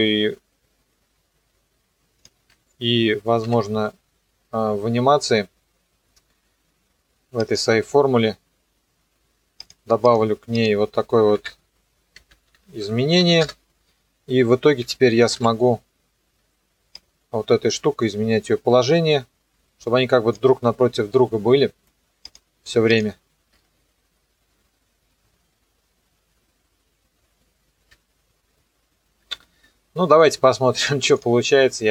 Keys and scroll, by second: 2.4 ctrl+z, 3.5 u, 11.4 KP_Add, 12.1-13.7 typing, 14.8 BackSpace, 15.4 KP_Enter, 23.5 KP_0, 27.8 KP_0, 29.2 KP_0.